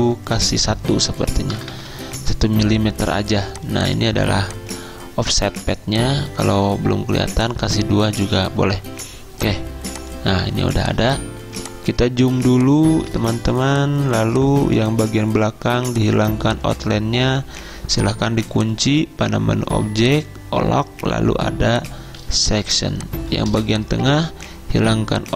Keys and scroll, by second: 1.6 BackSpace, 1.8 BackSpace, 2.0 1, 8.7 2, 11.5 z, 13.4 v, 22.2 z, 23.5 v.